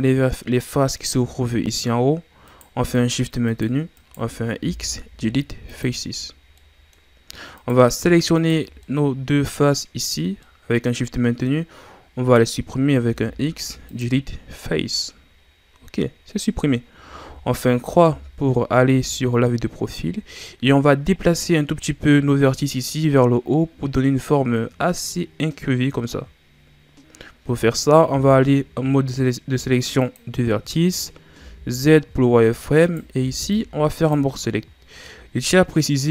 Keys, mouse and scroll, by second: 2.4 right click, 2.9 shift+right click, 3.5 shift+right click, 3.9 shift+right click, 4.6 x, 6.6-7.6 middle drag, 7.6 right click, 8.3 shift+right click, 8.8-9.9 middle drag, 9.9-10.4 scroll up 1, 10.4-13.0 middle drag, 13.0 x, 15.0-17.2 middle drag, 17.2 KP_3, 18.4 scroll up 4, 19.1-19.9 scroll down 3, 19.9-23.1 scroll up 2, 28.1 ctrl+Tab, 30.9-31.3 scroll up 2, 31.3 z, 32.0-32.8 scroll up 2, 32.8 right click, 33.2 b, 34.8-35.3 scroll down 1, 35.3-36.1 scroll up 1.